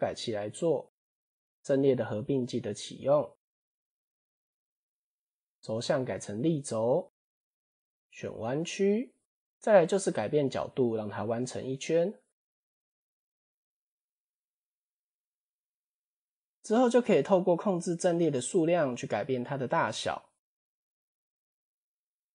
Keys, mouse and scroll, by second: 0.0 click, 3.2 click, 3.7-4.4 scroll down 8, 6.2-7.5 drag, 8.2 click, 11.2-12.9 drag, 16.0-16.4 scroll up 4, 16.8-17.6 scroll up 3, 17.6 click, 17.8 click, 18.0 click, 18.2 click, 18.5 click, 18.7 click, 19.0 click, 19.5-19.8 shift+middle drag.